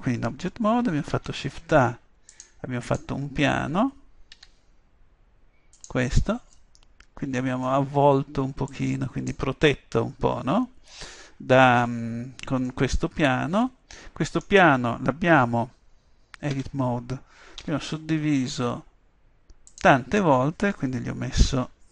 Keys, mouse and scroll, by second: 1.3 shift+a, 4.4 s, 5.9-7.9 drag, 8.8-10.6 drag, 10.7-12.8 middle drag, 16.6 Tab, 17.7 w.